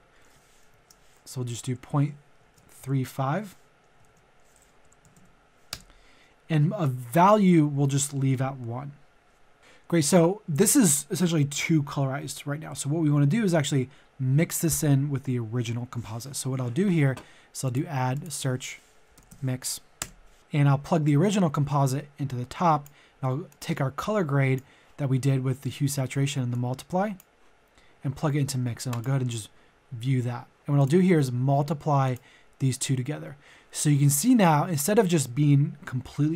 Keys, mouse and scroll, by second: 0.7 ctrl+z, 1.4 ctrl+a, 1.6 KP_Decimal, 1.9 KP_2, 2.4 ctrl+a, 2.6 KP_3, 2.8 KP_5, 4.0 ctrl+a, 4.8 KP_Decimal, 5.0 KP_3, 5.1 KP_5, 5.6 Return, 9.6 middle click, 17.6 click, 19.0 typing, 19.9 Return, 20.4-25.4 drag, 28.9 ctrl+shift+click.